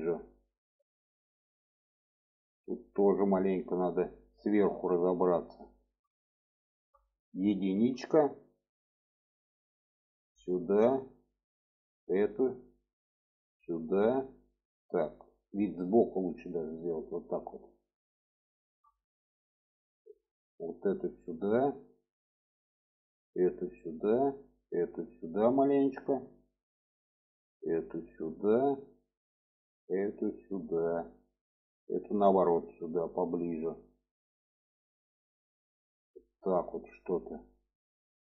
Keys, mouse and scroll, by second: 0.7-2.2 middle drag, 2.5-3.7 middle drag, 4.1 alt+middle click, 5.4 shift+middle click, 6.4 shift+middle click, 7.6 1, 8.3 click, 9.7-11.0 drag, 11.8 click, 12.6-13.7 drag, 14.3-16.0 middle drag, 16.5-17.7 alt+middle drag, 18.3 shift+middle click, 19.1 shift+middle click, 19.9 click, 20.6 click, 21.1-22.3 drag, 22.7 click, 23.3 click, 24.4 click, 25.1 click, 27.0 click, 27.7-28.8 drag, 29.3 click, 30.2 click, 31.7 click, 32.4-33.4 drag, 34.7-35.8 drag.